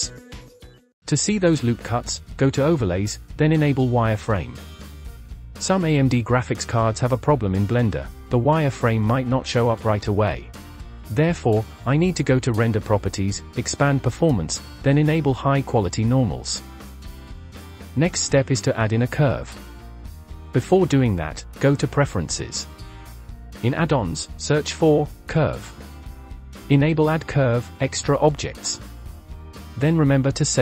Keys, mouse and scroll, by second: 2.4-4.9 drag, 11.6 click, 12.4-13.6 scroll down 5, 13.6-14.6 drag, 15.2 click, 15.7-16.7 scroll up 5, 17.5 click, 17.7 scroll down 2, 17.8 shift+middle drag, 18.1 click, 18.4-18.9 scroll down 4, 18.9-19.6 shift+middle drag, 19.6 click, 20.7-23.0 drag.